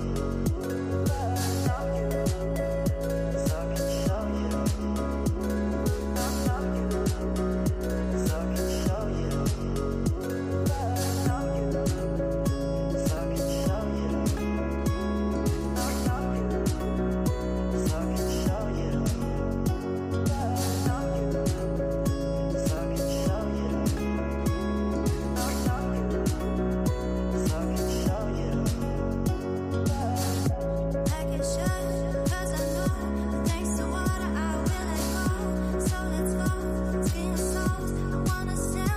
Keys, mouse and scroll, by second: 0.9-2.0 scroll up 25, 3.1 click, 7.2 space, 9.2-12.3 drag, 12.8 space, 25.3 space, 26.7-27.5 middle drag, 27.5 scroll down 2, 28.0-29.4 middle drag, 29.4 click, 31.4-34.5 drag, 37.7 scroll up 4, 38.1-38.9 middle drag.